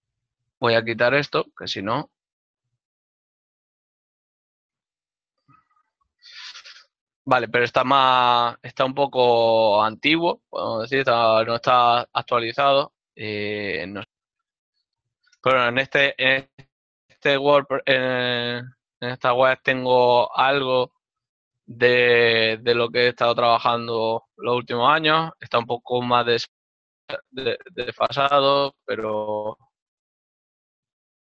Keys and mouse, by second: 1.4 click, 2.1 right click, 11.1 click, 16.0 click.